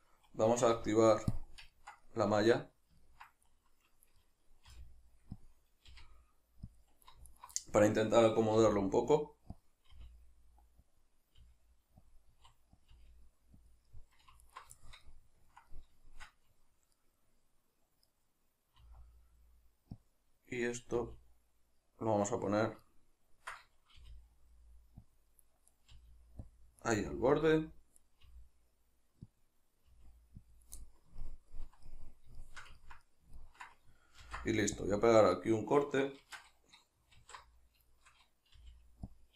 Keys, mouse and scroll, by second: 0.8 q, 1.8-5.5 ctrl+middle drag, 4.7 r, 5.5 click, 5.9 g, 6.8 click, 7.3 alt+right click, 7.6-9.6 middle drag, 8.6 r, 9.6 click, 9.9 g, 11.0 click, 11.4 g, 12.2 click, 12.3 s, 13.7 click, 13.9 middle click, 14.4 alt+right click, 14.8-20.1 shift+middle drag, 18.8 e, 20.1 click, 20.7-22.7 middle drag, 20.9 e, 22.7 click, 22.8-25.2 ctrl+middle drag, 23.9 g, 25.2 click, 25.7 right click, 26.0 g, 26.6 click, 26.8 right click, 27.0 g, 27.5 click, 28.0 right click, 28.2 g, 29.4 click, 29.9 g, 30.6 click, 30.8-35.5 middle drag, 34.2 ctrl+r, 35.5 right click, 36.2 shift+Tab, 37.2 alt+q, 38.0-39.2 shift+middle drag, 38.6 g, 39.2 click.